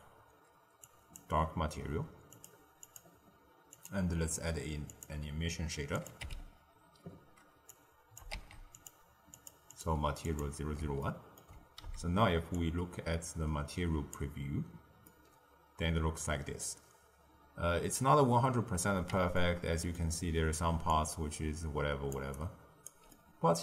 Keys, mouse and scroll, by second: 2.3-7.8 drag, 8.3 shift+d, 9.3 click, 9.6-11.0 drag, 11.0-11.7 ctrl+middle drag, 11.7 z, 15.0-18.0 middle drag, 19.3-20.7 ctrl+middle drag, 20.7 d, 20.8-22.0 drag, 22.0 d, 22.1 d, 22.3 right click, 22.8 d, 23.0-23.6 middle drag.